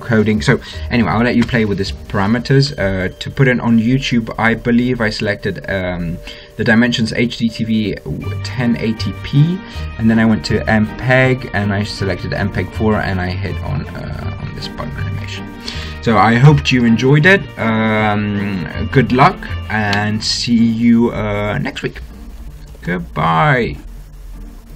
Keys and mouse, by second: 2.2-4.4 middle drag, 6.4-10.8 middle drag, 14.9-18.4 middle drag.